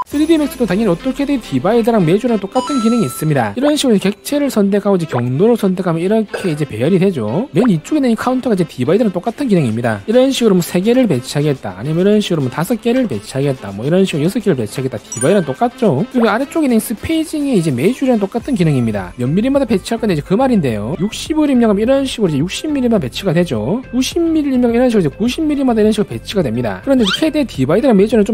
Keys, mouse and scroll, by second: 4.5 click, 5.6 click, 6.6 click, 10.2 click, 10.9 3, 12.1 click, 13.0 5, 13.9 click, 17.2 click, 18.1 click.